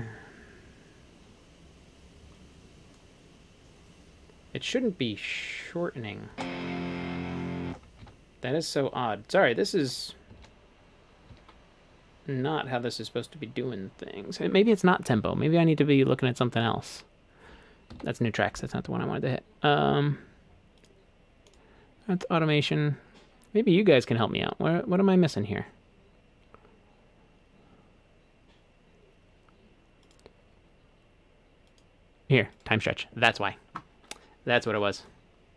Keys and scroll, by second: 6.3 space, 7.7 space, 8.1 super+z, 10.4 super+z, 11.3 super+z, 17.9 Home.